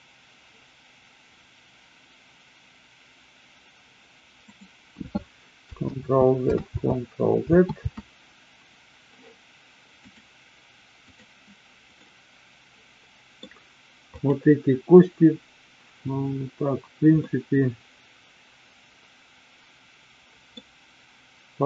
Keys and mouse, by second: 6.0 ctrl+z, 6.7 ctrl+z, 7.8 ctrl+z, 10.1-11.3 drag, 11.8-13.5 middle drag, 14.1 click, 17.1-20.5 middle drag.